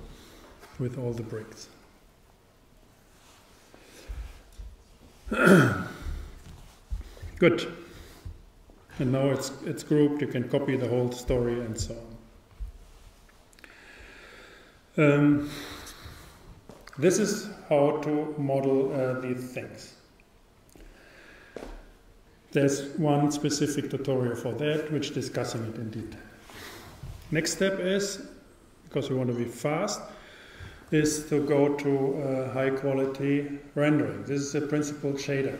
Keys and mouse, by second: 6.1-8.2 drag.